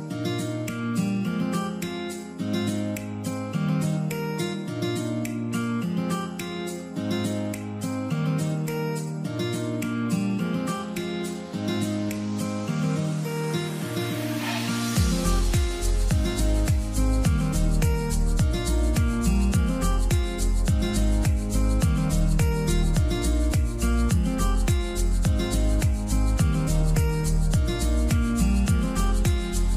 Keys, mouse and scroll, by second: 1.1 m, 2.0 alt+click, 2.9 alt+click, 4.9 alt+click, 7.5 alt+click, 9.6 alt+click, 18.8 right click, 21.1 right click, 21.7-23.0 typing, 24.2 double click, 25.2 shift+b, 28.7 space.